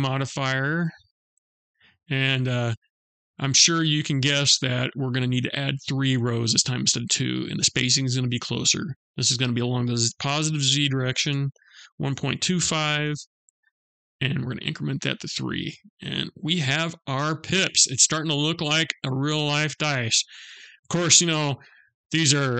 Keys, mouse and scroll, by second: 0.8-2.0 scroll down 4, 2.0 click, 8.6 click, 14.7 click, 15.4 middle click, 18.3-19.1 scroll down 3, 19.1 middle click.